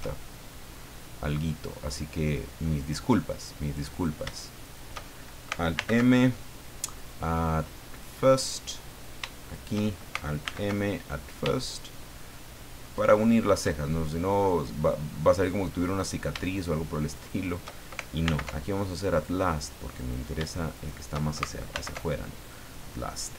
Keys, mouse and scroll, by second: 0.5 middle click, 2.8 click, 3.9 right click, 4.6 shift+right click, 5.8 alt+m, 7.9 click, 8.9 right click, 9.4 shift+right click, 10.4 alt+m, 11.0 alt+click, 11.5 alt+shift+middle click, 12.5 shift+middle click, 13.1 shift+middle click, 13.8 shift+middle click, 14.8 middle click, 16.0 right click, 17.1 shift+right click, 18.2 alt+m, 19.2 click, 20.0 right click, 20.7 shift+right click, 21.7 alt+m, 22.4 click, 22.9 scroll down 2.